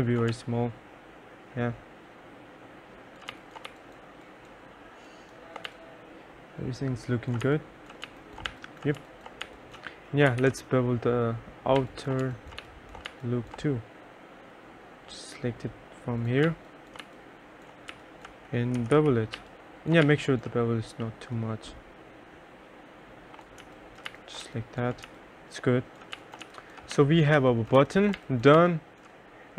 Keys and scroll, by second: 0.4 3, 3.4 2, 3.8 1, 5.8 2, 7.5-13.6 typing, 16.5-20.1 typing, 23.4-29.1 typing.